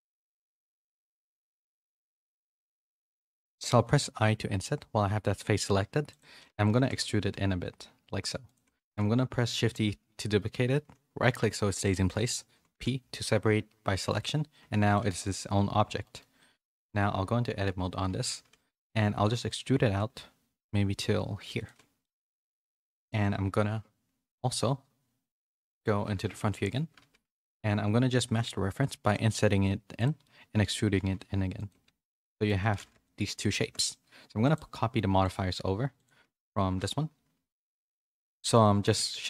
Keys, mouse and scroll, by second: 0.6 KP_1, 1.2 x, 2.4 z, 4.1 i, 6.5 middle click, 6.8 z, 8.7 middle click, 9.5 shift+d, 14.6 Tab, 15.1 g, 16.5 Tab, 17.2 a, 17.9 KP_3, 18.8 z, 19.7 e, 21.7 z, 22.1 middle click, 22.5 3, 26.1 KP_1, 26.9 x, 27.5 z, 29.0 i, 30.3 middle click, 32.0 middle click, 32.5 Tab, 32.9 a, 33.0 middle click, 33.6 shift+middle click, 34.5 click, 35.9 shift+click, 37.4 ctrl+l.